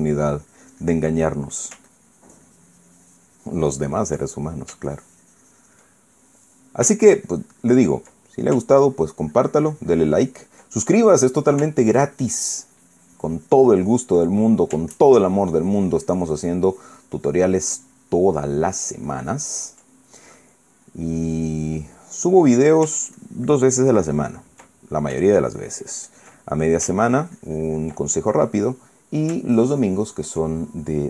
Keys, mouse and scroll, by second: 0.5-1.9 ctrl+drag, 1.9 ctrl+middle click, 2.6-4.9 ctrl+drag, 5.0 ctrl+middle click, 5.6 ctrl+click, 6.7 ctrl+middle click, 6.8 ctrl+click, 7.7-9.3 ctrl+drag, 9.4-11.4 ctrl+drag, 11.5 ctrl+middle click, 12.6-15.0 ctrl+drag, 15.0 ctrl+middle click, 15.5 ctrl+scroll up 1, 15.6-20.6 ctrl+drag, 20.6-21.9 ctrl+middle drag, 22.2-23.6 middle drag, 23.9-25.2 ctrl+drag, 25.4 ctrl+middle click, 26.0 ctrl+click, 27.1 ctrl+middle click, 28.6-30.0 ctrl+drag, 28.7-30.0 ctrl+middle drag, 30.3 ctrl+click.